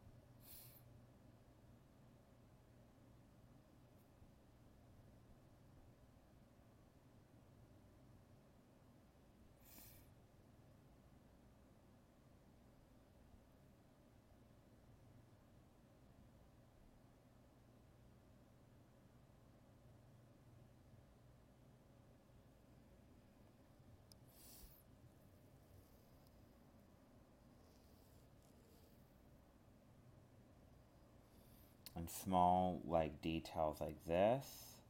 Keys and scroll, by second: 7.0 alt+space, 10.2 alt+space, 16.9 alt+space, 21.0 alt+space, 26.7 alt+space, 28.6 alt+space, 33.6 alt+space.